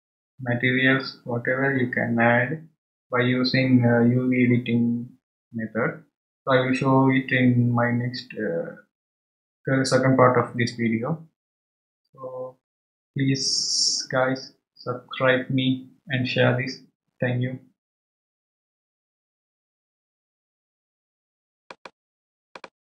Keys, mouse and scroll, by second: 1.3-3.9 scroll down 1.